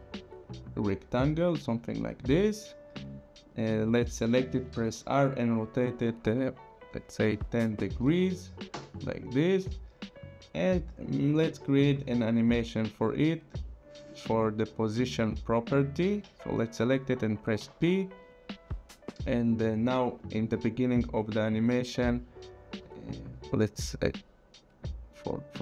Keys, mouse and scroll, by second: 3.4 click, 4.9 r, 5.9 click, 7.9 KP_1, 8.0 KP_0, 8.7 Return, 10.2 click, 13.4 click, 16.0 click, 17.6 p, 23.3 click, 25.3 shift+click.